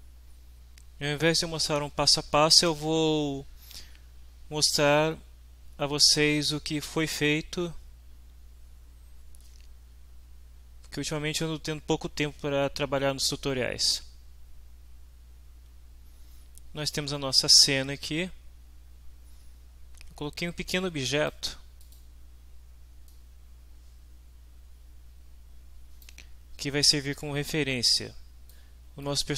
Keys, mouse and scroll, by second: 20.8-21.5 drag, 21.8 click, 23.1-26.2 drag, 27.2-28.7 drag, 29.0-29.3 middle drag.